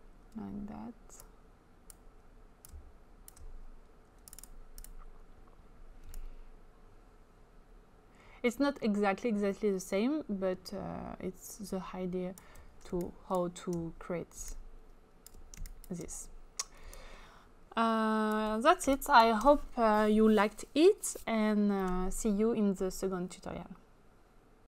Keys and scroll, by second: 12.9 space, 15.7 space, 18.8 space.